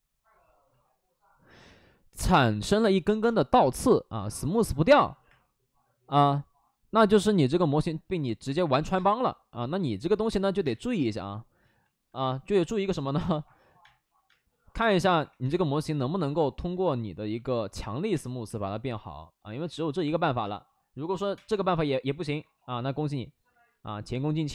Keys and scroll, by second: 2.2 space, 2.6 3, 3.0 space, 3.1 3, 4.8 space, 5.2 3, 8.4 space, 8.9 space, 10.0 ctrl+z, 10.5 space, 11.1 space, 12.1-16.1 typing, 16.1 ctrl+z, 16.6 ctrl+z, 18.1 space, 18.4 1, 19.5 ctrl+z, 20.4 space, 21.4 4, 21.4 5, 22.2 ctrl+z, 23.4 ctrl+z.